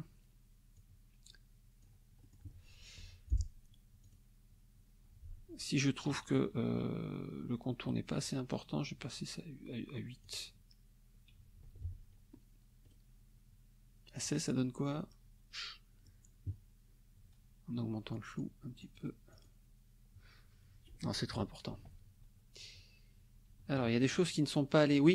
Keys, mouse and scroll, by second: 0.8-2.0 drag, 2.2 middle click, 2.5 click, 3.0 F2, 3.3 click, 4.0 click, 7.8 right click, 10.2 click, 11.8 ctrl+z, 12.8 right click, 14.1 click, 18.1 click, 18.8 click, 19.3 click, 21.1 ctrl+z, 23.5 ctrl+z.